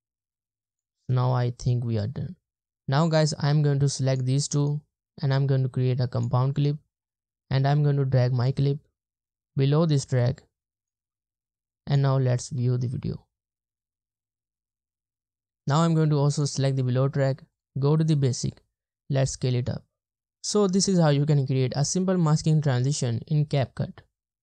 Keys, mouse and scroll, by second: 0.9 space, 2.0 space, 4.6 right click, 12.6 space, 15.2 space.